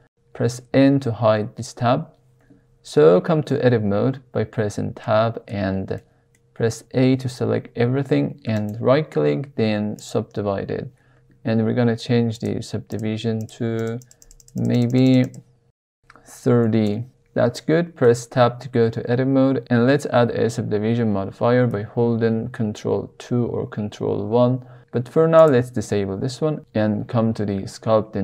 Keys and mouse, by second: 0.0 n, 3.5 Tab, 5.0-5.5 shift+middle drag, 6.0 middle click, 6.7 a, 8.7-10.1 right drag, 12.3 click, 12.9 click, 13.3 click, 13.7 click, 13.9 click, 14.2 click, 14.4 click, 14.5 click, 14.9 click, 15.8-17.5 drag, 18.0 Tab, 22.9 ctrl+2, 25.3 click.